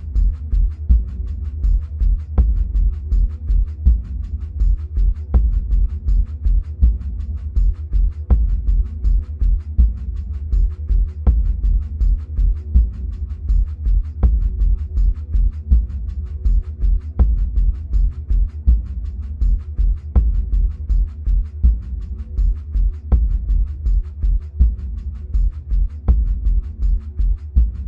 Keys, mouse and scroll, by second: 19.6-20.8 middle drag, 20.8-21.7 scroll up 2, 21.8-23.0 middle drag, 23.0-23.7 scroll up 2, 23.7-25.5 scroll down 2, 25.5-27.1 scroll down 1, 27.1 click.